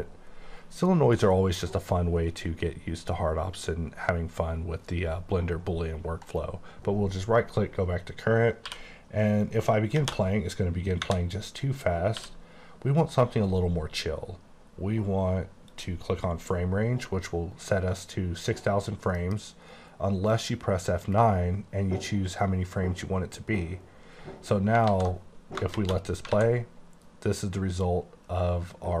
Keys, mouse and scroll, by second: 4.4-6.4 scroll up 7, 6.4 right click, 8.8 q, 10.0 space, 12.2 q, 15.8 click, 17.0-18.1 scroll down 1, 19.3 F9, 20.4 click, 24.9 alt+Num_Lock, 24.9 click, 24.9 a, 26.4 a.